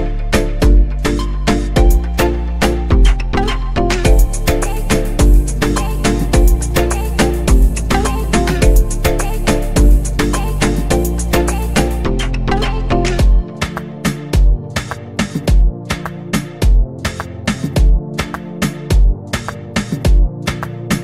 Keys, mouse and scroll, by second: 0.5-0.9 drag, 0.9-2.8 scroll down 5, 2.8-5.9 drag, 6.8 click, 10.6-21.0 drag.